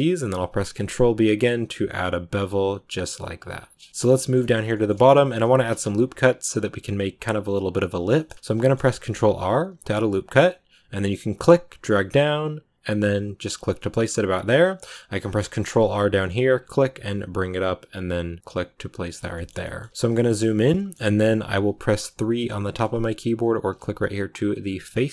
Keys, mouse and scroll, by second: 3.5-3.9 scroll down 3, 3.7 middle click, 3.9 shift+middle click, 4.3 scroll up 2, 4.6 shift+middle click, 4.9 scroll down 2, 8.1 shift+middle click, 8.2 scroll down 1, 8.5 shift+middle click, 8.9 ctrl+r, 14.1 scroll down 1, 14.2 middle click, 14.3-15.0 scroll up 2, 15.0 ctrl+r, 19.2 shift+middle click, 19.5 scroll up 1, 19.8-22.2 shift+middle drag, 22.2 3.